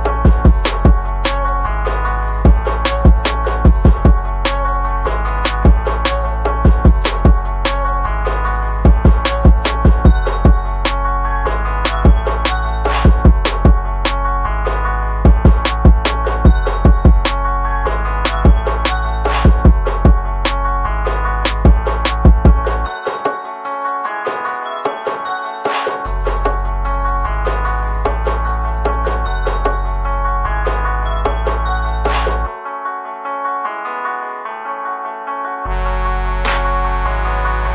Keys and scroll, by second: 8.6 ctrl+z, 18.7 ctrl+z.